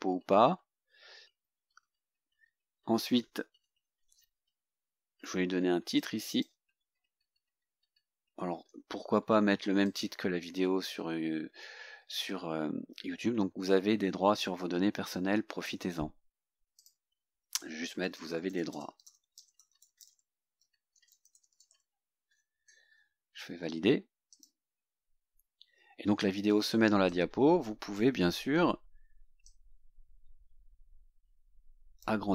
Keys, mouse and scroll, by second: 0.5-0.9 scroll down 2, 1.4-2.7 scroll up 6, 6.0-6.7 drag, 9.9 click, 16.8 click, 17.8-22.3 typing, 22.9 scroll down 2, 23.5 scroll up 2, 24.4 click, 25.9 scroll down 2, 27.1-28.2 drag, 29.5-32.3 drag.